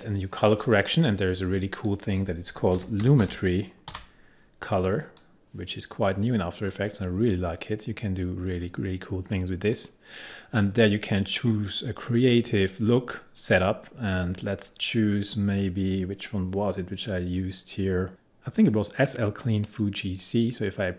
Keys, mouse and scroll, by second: 1.9 click, 2.6-3.9 typing, 5.3-9.2 drag, 9.9 click, 14.2 click, 19.8 click.